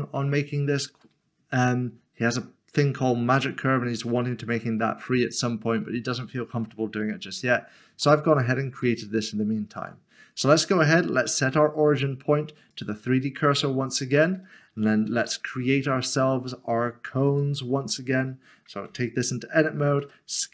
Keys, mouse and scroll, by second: 0.2 shift+middle click, 3.9-4.7 scroll down 1, 7.1-7.9 scroll down 1, 8.0 shift+middle click, 9.8 right click, 12.7 right click, 17.3 click, 20.1 typing.